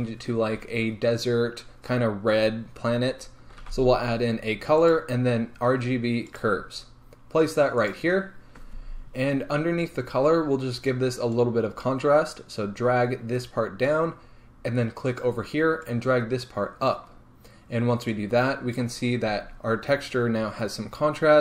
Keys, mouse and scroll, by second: 1.8-7.1 scroll up 1, 7.1-7.9 scroll up 1, 7.9 scroll up 1, 8.0 click, 13.9-21.4 drag, 19.2 scroll up 1.